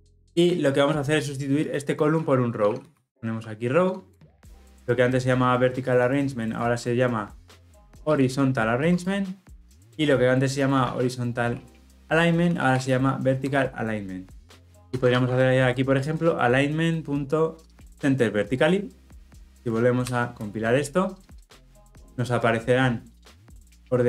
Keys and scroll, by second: 4.0 Return, 8.8 Tab, 13.3 Return, 14.8 ctrl+z, 17.8 Return.